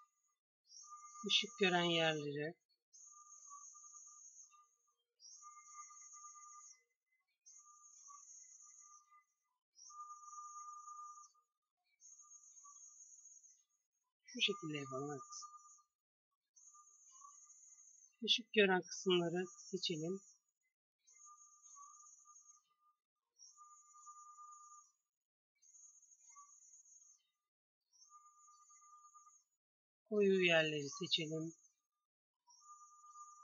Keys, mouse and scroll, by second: 9.8 c, 12.3-14.0 drag, 15.6 c, 23.6 g, 28.1 Tab, 28.9 Tab.